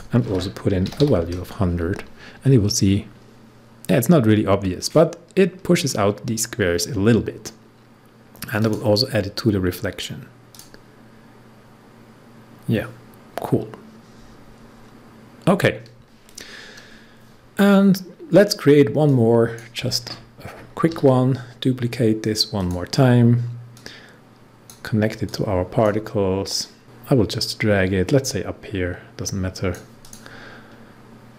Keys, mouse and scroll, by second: 0.2-0.9 typing, 8.5 click, 13.3 scroll down 1, 14.2 scroll up 1, 19.0-20.8 drag, 20.8 ctrl+d, 22.5-28.6 drag, 30.0 click.